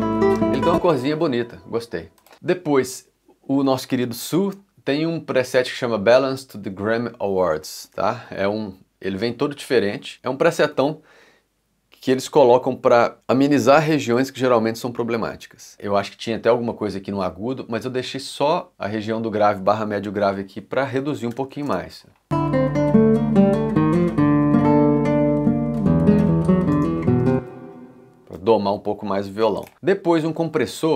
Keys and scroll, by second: 0.1 space, 0.8 c, 21.7 space, 26.7 space, 28.3 x, 29.4 c.